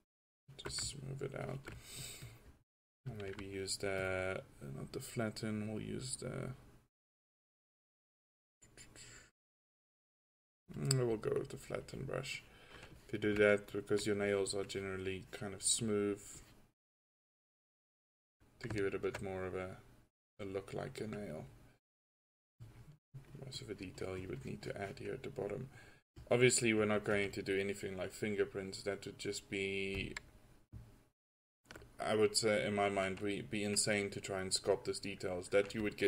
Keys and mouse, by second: 6.1-7.3 middle drag, 7.6-11.9 middle drag, 11.9-13.5 drag, 19.3 middle drag, 19.5 middle click, 20.9 drag.